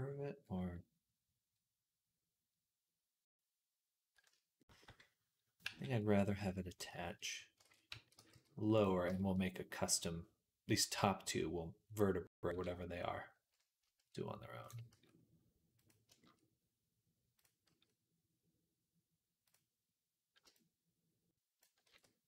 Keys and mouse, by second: 5.7 g, 6.9 shift+middle click, 7.5 ctrl+z, 7.8 a, 8.0 g, 8.9-15.9 shift+middle drag, 14.8 s, 15.9-22.2 shift+drag, 17.5 s, 21.7 ctrl+z.